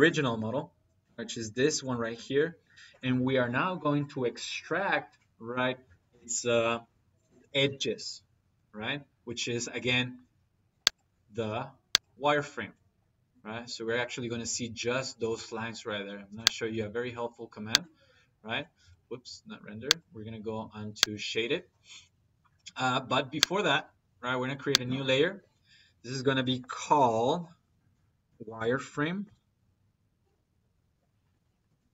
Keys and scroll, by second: 28.1 w, 28.4 r, 28.7 f, 29.1 m, 31.5 Left, 31.8 r.